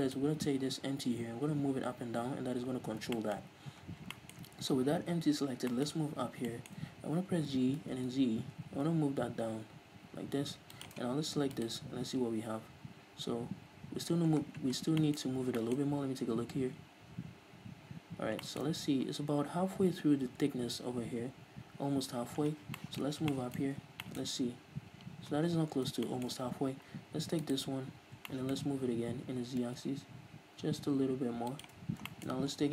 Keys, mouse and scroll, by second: 0.0-0.3 scroll down 1, 0.3-1.6 right drag, 1.6-3.3 scroll up 1, 3.5-11.2 shift+middle drag, 3.8-4.4 scroll up 2, 4.9-5.5 scroll down 2, 5.5-6.8 scroll up 4, 7.8 g, 11.2 shift+click, 11.9-12.9 right drag, 12.9-14.1 scroll up 2, 14.1-14.5 scroll up 1, 14.5-15.1 scroll down 3, 15.3-27.7 shift+middle drag, 15.5 scroll up 1, 16.0-16.6 shift+scroll up 1, 17.1 scroll up 1, 18.9-19.4 shift+scroll up 1, 22.6 scroll down 1, 23.9 scroll up 1, 24.5 scroll up 1, 25.6 scroll down 1, 27.0-27.4 scroll down 1, 27.7 right click, 28.0 scroll up 1, 28.6-31.9 middle drag, 29.7 g, 31.9 shift+click, 32.1 scroll down 1, 32.4 shift+middle click, 32.6 scroll up 1.